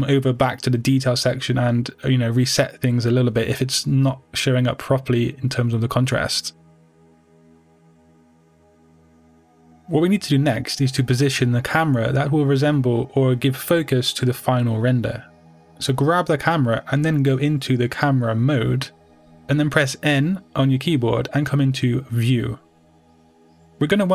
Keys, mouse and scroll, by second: 0.1-7.9 middle drag, 0.4-0.8 scroll down 2, 1.1-1.6 scroll down 2, 1.6-3.2 scroll up 2, 5.2-6.8 scroll up 2, 6.8-7.9 scroll up 1, 7.9-13.8 drag, 13.8-16.2 middle drag, 13.8-14.1 scroll down 2, 16.2 click, 16.8-24.1 middle drag, 19.2 KP_0, 21.8 n.